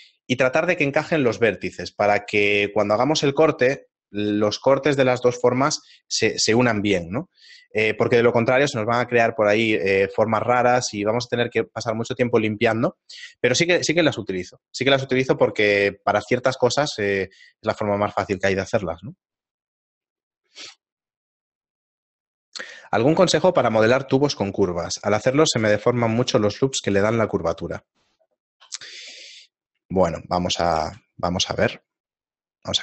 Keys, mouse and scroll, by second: 29.4 middle click, 29.9 shift+middle click, 30.8 shift+a.